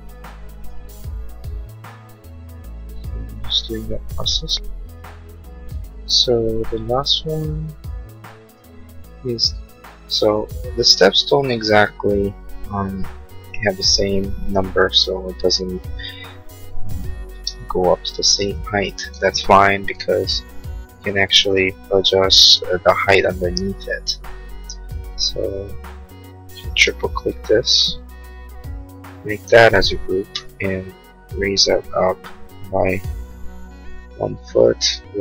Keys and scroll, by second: 17.3 space, 18.6 Delete, 29.5 g, 33.0 1, 33.4 Return.